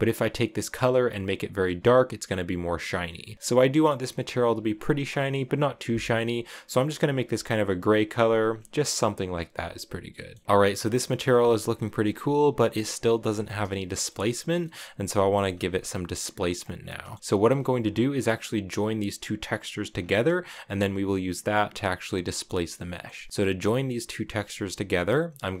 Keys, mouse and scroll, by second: 3.2 shift+middle drag, 3.4 scroll down 2, 5.2 click, 9.8 scroll up 1, 9.9 middle click, 10.5 scroll down 1, 10.6-13.3 middle drag, 13.3 scroll down 2, 13.6-15.2 shift+middle drag, 15.2-16.3 scroll up 1, 16.3 click, 16.7 middle click, 17.2-18.1 scroll up 3, 18.1 click, 18.6 click, 18.9 click, 19.5 click, 19.7 scroll down 3, 19.8-21.6 middle drag, 21.6-22.0 scroll up 1, 22.0-25.6 middle drag.